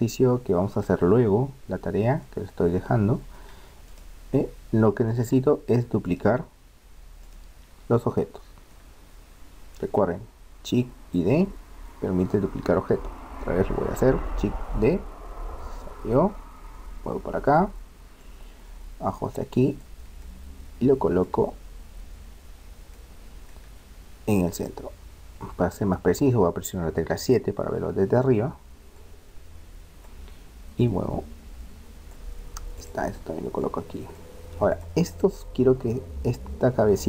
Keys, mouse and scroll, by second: 2.2-3.8 middle drag, 3.9-8.0 right drag, 8.0-9.8 middle drag, 14.7 shift+d, 18.2-19.9 drag, 20.3-22.1 middle drag, 23.0-24.6 middle drag, 24.6-26.5 drag, 27.2 KP_7, 29.0-30.7 drag, 30.8-32.6 drag, 32.7-36.7 right drag, 33.7-35.4 drag.